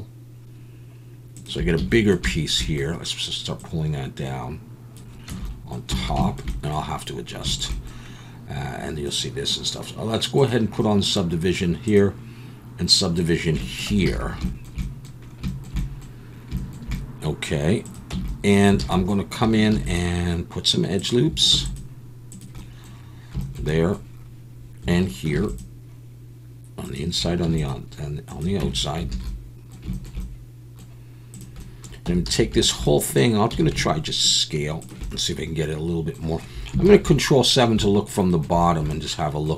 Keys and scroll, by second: 1.8 a, 5.3 Tab, 6.1 alt+a, 14.1 alt+a, 18.1 Tab, 18.8 alt+a, 19.7 ctrl+r, 21.5 ctrl+r, 25.3 ctrl+r, 27.4 ctrl+r, 28.6 Tab, 29.1 alt+a, 32.1 Tab, 32.3 a, 33.5 s, 36.8 ctrl+KP_7.